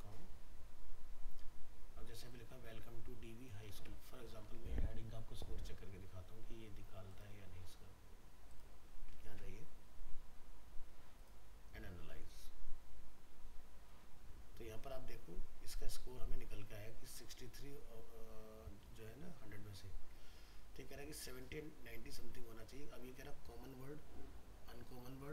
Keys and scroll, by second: 3.8 ctrl+c, 9.3 ctrl+v.